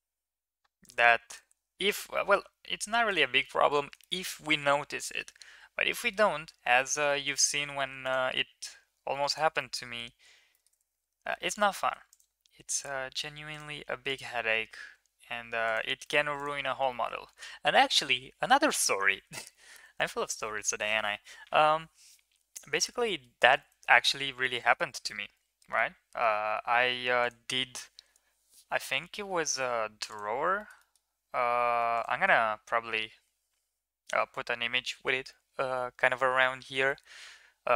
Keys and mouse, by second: 1.0 ctrl+r, 3.2 middle click, 3.8 shift+middle click, 4.9 shift+middle click, 5.8 middle click, 7.0 shift+middle click, 7.6 ctrl+r, 9.5 middle click, 10.6 ctrl+z, 11.1 middle click, 11.8 ctrl+r, 13.9 ctrl+r, 15.9 middle click, 16.7 shift+middle drag, 17.0 middle drag, 17.9 Tab, 18.3 middle drag, 19.5 ctrl+s, 22.7 Tab, 22.9 middle drag, 23.6 middle drag, 24.2 middle drag, 24.9-25.6 middle drag, 29.1 3, 29.9 click, 30.4 shift+middle click, 30.6 middle click.